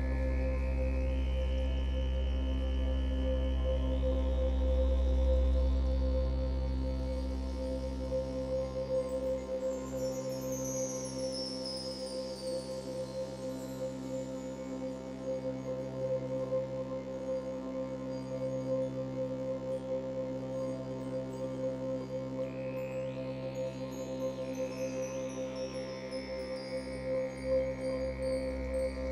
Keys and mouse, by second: 1.9 ctrl+click, 2.4 alt+shift+click, 5.3-29.1 ctrl+z, 6.3-20.7 drag, 20.9-22.4 drag, 22.6 click, 24.0 click, 25.4 click, 26.6-28.8 alt+drag.